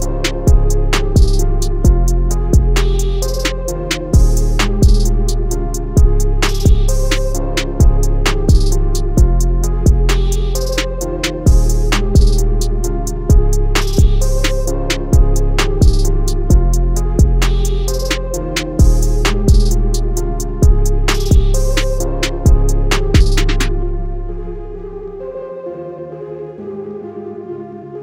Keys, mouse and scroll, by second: 5.8 shift+Num_Lock, 7.2 click, 12.3 click, 14.7 click.